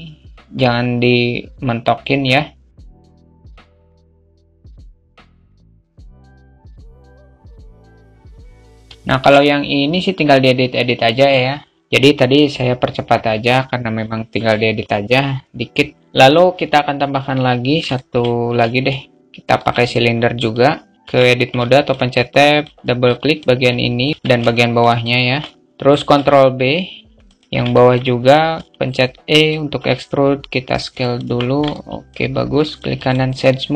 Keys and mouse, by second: 2.9 ctrl+r, 2.9 alt+shift+middle click, 3.3 ctrl+r, 3.4 ctrl+r, 3.4 ctrl+z, 3.7 ctrl+r, 4.0 ctrl+r, 4.3 ctrl+r, 4.4 Tab, 4.5 Tab, 4.5 ctrl+r, 5.4 click, 5.6 ctrl+z, 5.7 ctrl+z, 5.8 Tab, 5.8 ctrl+r, 6.8 alt+shift+middle click, 7.3 ctrl+r, 7.5 alt+shift+Tab, 7.5 alt+middle click, 7.7 alt+middle click, 8.2 middle click, 8.4 alt+Tab, 8.4 alt+z, 8.4 click, 8.8-17.1 shift+middle drag, 17.3-17.8 shift+middle drag, 19.9 click, 20.9 alt+Tab, 21.0 alt+middle click, 21.7 click, 21.9 click, 22.4 alt+middle click, 23.4 shift+click, 24.1 ctrl+shift+z, 24.1 shift+click, 25.6 ctrl+b, 27.2 Tab, 27.2-30.5 middle drag, 27.2 3, 30.5 s, 31.1-31.5 alt+middle drag, 32.2 right click, 33.2 Tab.